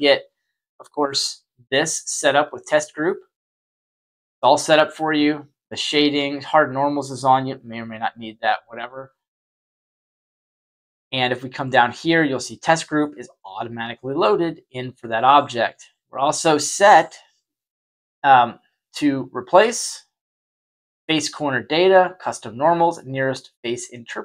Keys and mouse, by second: 5.4 click, 6.5 click, 7.0 click, 8.2 click, 9.3 click, 20.5 click.